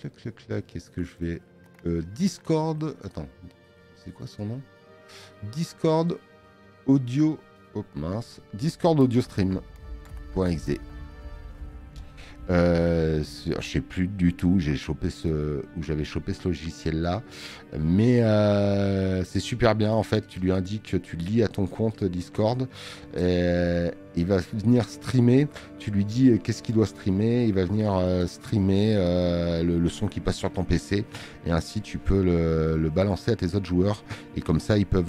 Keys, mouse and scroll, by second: 6.1 click.